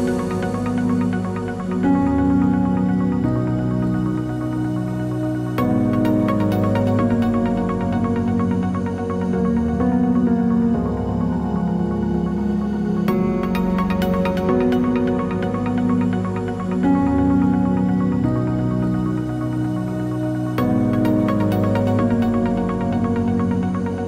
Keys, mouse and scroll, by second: 0.5 Return, 1.2 shift+click, 2.2 click, 2.6 shift+click, 4.1 click, 4.7 ctrl+a, 5.2 click, 9.3 typing, 11.1 typing, 12.8 typing, 14.6 ctrl+s, 16.2 click, 17.5 KP_1, 17.6 KP_8, 17.9 KP_0, 18.3 Tab, 19.2 KP_5, 19.3 KP_0, 19.4 Return, 21.9 click.